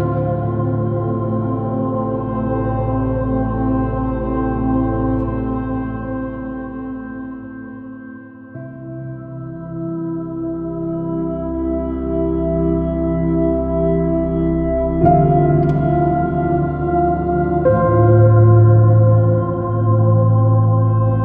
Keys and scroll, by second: 0.6 super+z, 5.0 super+space, 11.7 space, 15.3 space, 16.4 space, 17.8 b.